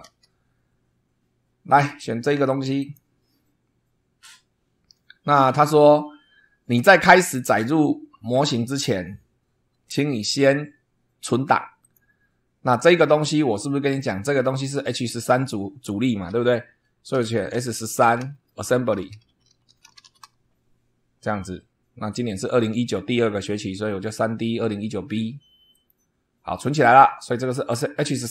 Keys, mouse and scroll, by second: 0.0 super+2, 2.7 click, 11.8 click, 14.2 click, 15.1 click, 16.9-20.7 typing, 25.7 click.